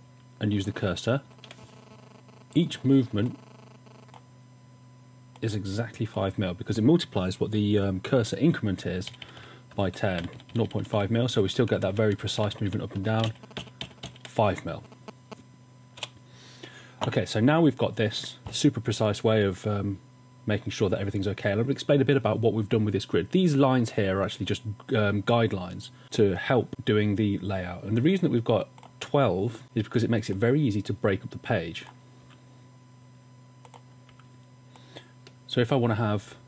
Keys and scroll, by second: 0.5 shift+Right, 1.1 shift+Right, 9.1 Up, 9.3-13.8 typing, 10.3 Up, 10.5 Up, 11.6 Down, 11.8 Down, 14.0 Up, 16.0 typing, 17.2 typing, 32.3 v, 35.2 v.